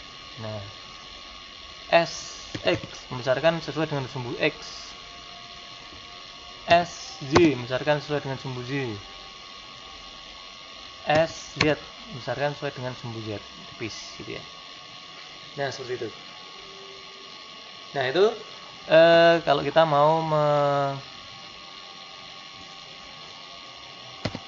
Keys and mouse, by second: 2.5 s, 6.6 s, 11.0 s, 19.8-22.6 middle drag, 22.6 right click, 24.1 middle click, 24.1 g.